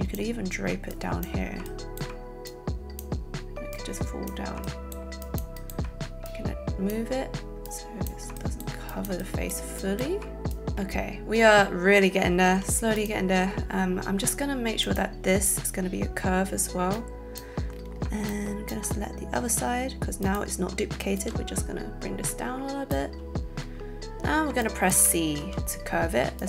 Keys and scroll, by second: 12.5 z, 25.3 alt+c.